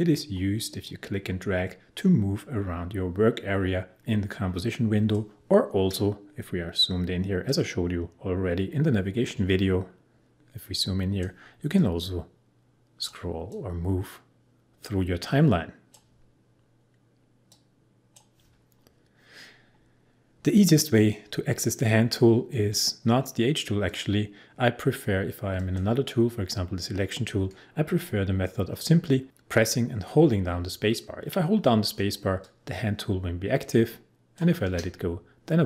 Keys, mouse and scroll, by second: 0.9-7.4 drag, 7.4-9.3 drag, 10.3-23.8 drag, 30.2 space, 32.4 click, 32.5 space.